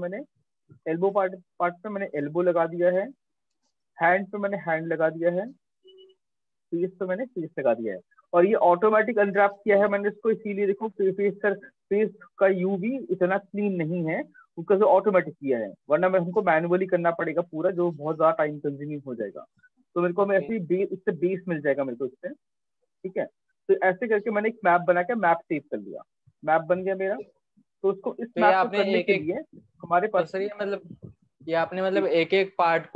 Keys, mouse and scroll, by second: 0.1-1.6 scroll, 1.8-2.2 middle click, 2.0 middle click, 2.6 middle click, 3.1 middle click, 3.3 middle click, 3.4 middle click, 4.2 middle click, 4.7 middle click, 5.1 middle click, 5.4 middle click, 5.6 middle click, 5.8 middle click, 6.7 middle click, 9.8 middle click, 19.4 middle click, 19.5 middle click, 20.8 middle click, 21.0 middle click, 21.3 middle click, 21.4 middle click, 22.2 middle click, 22.4 middle click, 22.8 middle click, 23.0 middle click, 23.5 middle click, 26.0 right click, 27.2 click, 27.8 click, 29.7 click.